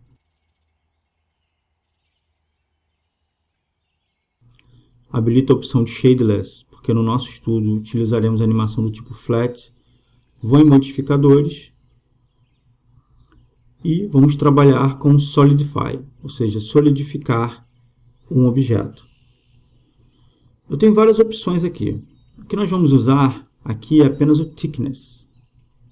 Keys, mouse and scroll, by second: 3.9-4.9 drag, 6.4-8.1 drag, 11.2-13.0 drag, 14.5-16.3 drag, 18.7 middle click.